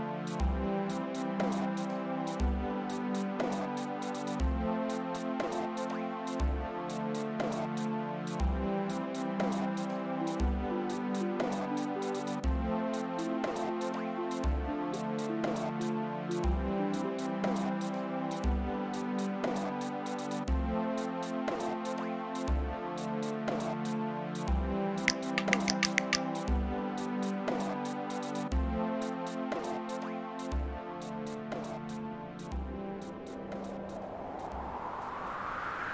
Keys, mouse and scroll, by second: 0.1 click, 4.1 click, 8.0 click, 10.1 space, 12.8 space, 14.9 space, 17.4 space, 18.6 click, 19.7-21.8 drag, 23.4 click, 27.5 click, 31.2 click.